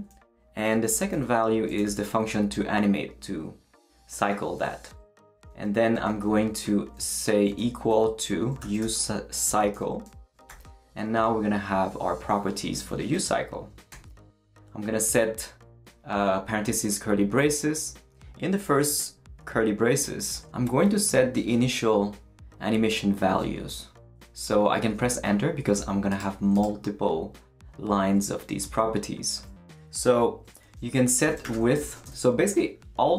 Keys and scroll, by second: 0.0-2.4 typing, 5.8 Right, 6.1-10.5 typing, 9.7 Return, 10.3 shift+Return, 13.9 shift+[, 24.9 Return, 30.8-32.4 typing.